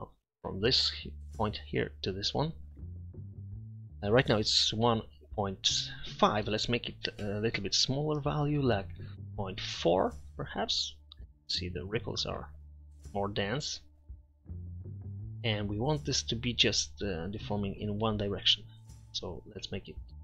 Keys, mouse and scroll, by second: 0.4-0.9 middle drag, 0.9-2.0 drag, 2.8-4.1 drag, 6.4 click, 16.1-17.4 middle drag.